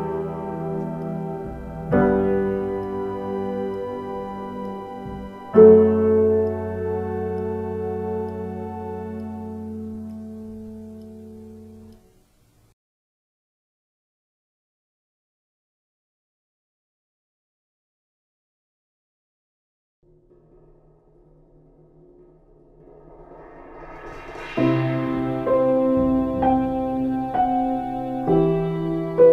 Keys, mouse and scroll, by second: 1.3 ctrl+space, 3.4 ctrl+z, 4.7 ctrl+z, 5.7 ctrl+z, 9.7 ctrl+z, 11.9 ctrl+space, 14.4 ctrl+z, 15.5 space, 16.1 ctrl+z, 18.9 ctrl+z, 25.8 ctrl+space, 26.5 space.